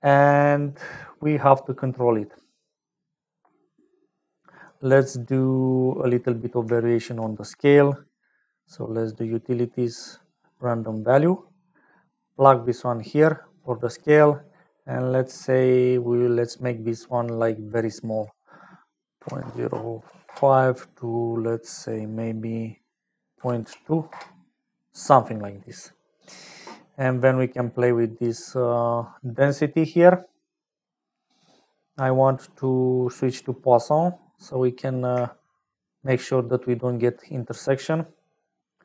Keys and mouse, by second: 0.0 middle click, 5.4 middle click, 6.9 shift+a, 12.2-13.4 drag, 14.0-15.0 drag, 18.3-21.0 drag, 21.7-24.6 drag, 26.9 click, 28.6 middle click, 33.0 click, 34.3 middle click, 35.4-38.8 shift+drag.